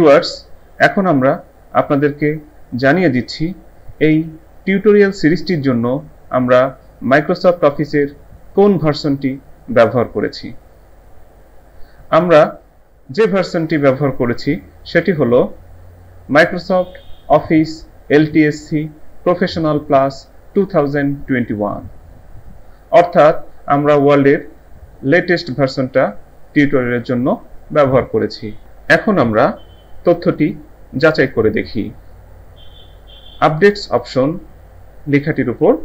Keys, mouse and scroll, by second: 15.0 click.